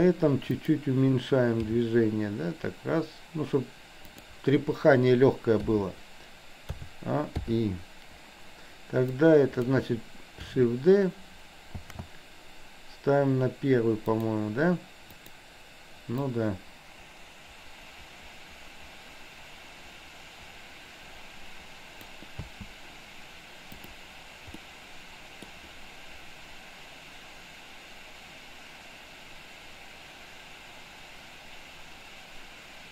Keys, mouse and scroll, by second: 0.7 click, 1.8 g, 5.7 i, 6.8 a, 7.4 i, 9.2-9.7 drag, 11.9 shift+d, 15.2 click, 16.3-22.3 drag, 22.5 space, 24.5-25.5 middle drag.